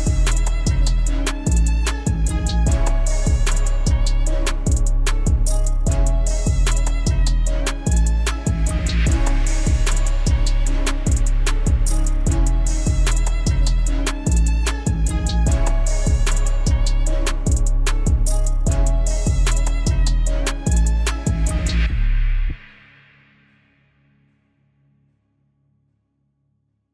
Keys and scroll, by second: 8.7 F4, 16.1 F4.